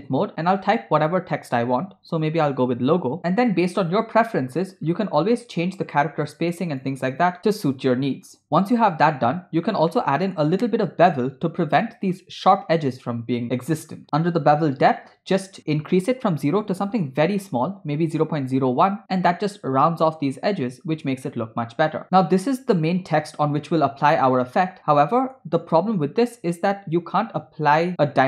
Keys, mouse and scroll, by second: 0.3-2.7 typing, 3.2 Tab, 3.7-4.3 scroll down 4, 4.5-6.2 scroll down 4, 6.5 click, 6.7 click, 8.2 click, 9.1 scroll up 3, 10.0-10.5 shift+middle drag, 10.5 scroll up 1, 10.6 scroll down 1, 11.3-11.6 scroll up 2, 11.9 shift+middle click, 12.0 shift+click, 13.5-14.1 scroll up 9, 15.6-18.3 drag, 21.3-21.7 scroll down 2, 22.4 middle click, 23.9 scroll down 1, 24.1-25.4 middle drag.